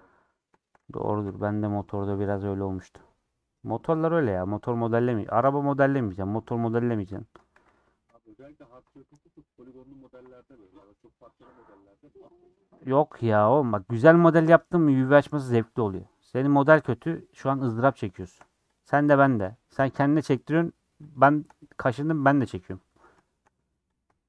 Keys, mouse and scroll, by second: 0.0-1.0 middle drag, 1.0 a, 1.2 u, 2.2-4.4 middle drag, 4.4-4.7 scroll down 5, 4.7-5.9 middle drag, 5.9 scroll up 3, 6.3 middle click, 7.0 scroll down 3, 7.2 middle click, 7.5 a, 7.9 middle click, 8.4 scroll up 2, 9.1 click, 10.4-11.5 middle drag, 11.5 click, 12.3 click, 12.5-13.5 middle drag, 13.5 ctrl+click, 13.7 middle click, 14.2 shift+middle click, 14.9 click, 16.3-17.9 middle drag, 17.9 click, 18.7 click, 19.4-20.4 middle drag, 20.4 shift+click, 21.1 shift+click, 21.7 middle click, 22.7 scroll up 3, 23.2 shift+middle click, 23.9 click.